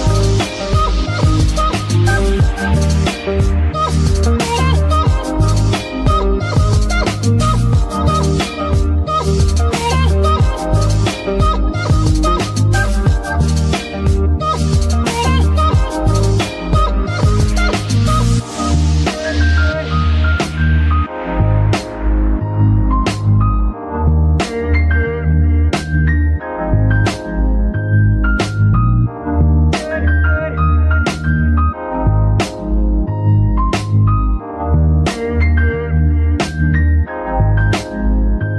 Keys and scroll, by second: 3.1 F2, 4.2 b, 4.3 a, 4.6 c, 4.9 k, 5.2 Return, 13.4 g, 13.9 Tab, 14.5 s, 15.3 Tab, 15.9 s, 17.2 KP_3, 19.7 g, 19.8 y, 32.8-35.3 typing, 37.4 Tab.